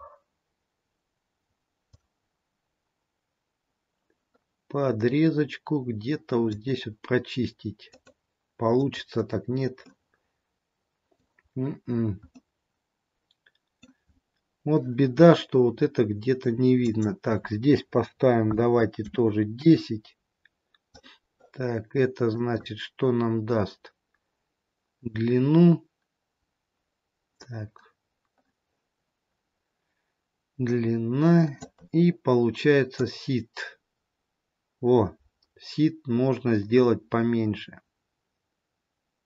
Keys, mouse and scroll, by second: 2.1 click, 7.8 click, 10.0 middle click, 10.0-11.0 scroll down 1, 11.6-12.1 scroll up 1, 12.4-12.9 scroll up 1, 12.9 middle click, 16.8 click, 22.5 click, 32.8 click.